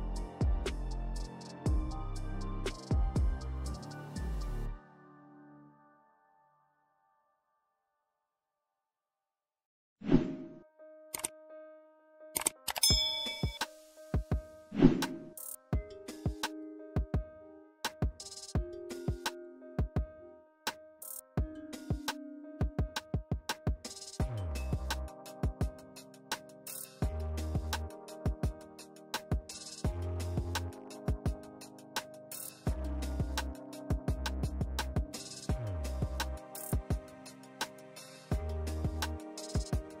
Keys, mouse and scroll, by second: 2.4 click, 3.4 n, 4.7 ctrl+Return, 5.7 click, 8.0 click, 10.4 click, 12.7 scroll down 1, 15.7-17.6 scroll up 1, 18.6-19.5 drag, 22.5-23.4 drag, 27.7 click, 29.2 click, 32.5 click, 33.1 shift+Up, 33.7 shift+Down, 35.0 shift+Up, 35.7 Up, 36.6 Down, 37.8 click, 39.1-40.0 alt+drag.